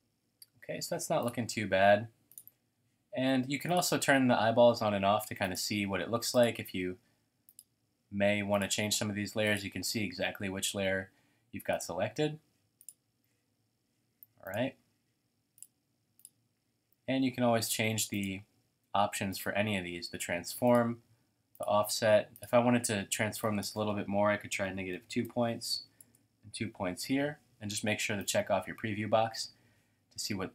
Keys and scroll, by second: 3.3-4.0 typing, 18.3-19.1 typing, 24.4-26.0 typing.